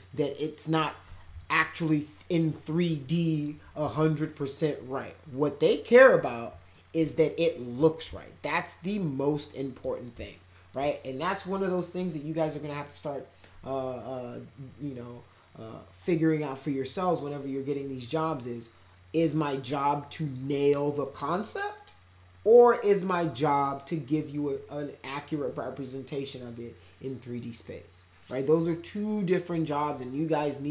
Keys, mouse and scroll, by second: 1.3-3.4 alt+middle drag, 3.9-6.2 alt+middle drag, 6.7 alt+middle click, 8.1-9.8 alt+middle drag, 10.0 alt+middle click.